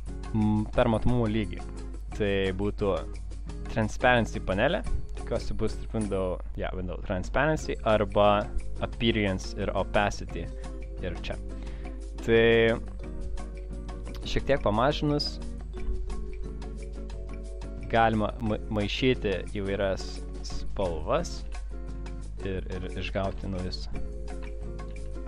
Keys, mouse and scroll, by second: 4.8 click, 7.9 click, 9.5 click, 11.7 click, 14.1 click, 14.8 click, 15.0 click, 16.3 click, 16.3 click, 17.8 click, 17.9 click, 18.4 click, 18.5 click, 20.6 click, 21.5 ctrl+shift+[, 22.7 click, 23.4 ctrl+x, 24.9 ctrl+shift+v.